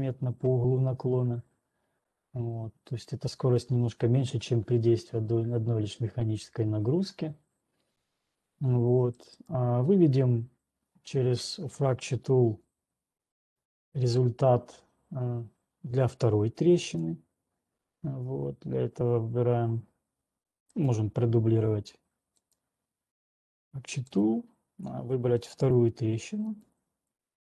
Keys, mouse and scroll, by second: 10.0 right click, 17.2 click, 21.3 click, 22.7 click, 24.7 click, 25.7 click, 26.2 click.